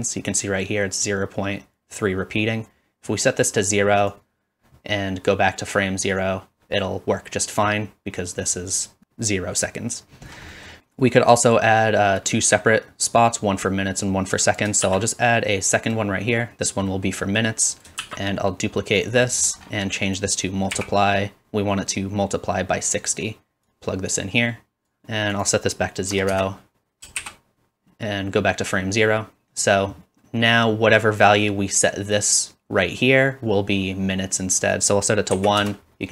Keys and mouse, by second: 10.8 space, 14.5 middle click, 14.8 shift+d, 17.8 click, 18.0-19.7 shift+drag, 18.0 shift+d, 19.7 middle click, 20.0-36.1 drag, 27.2 shift+Left.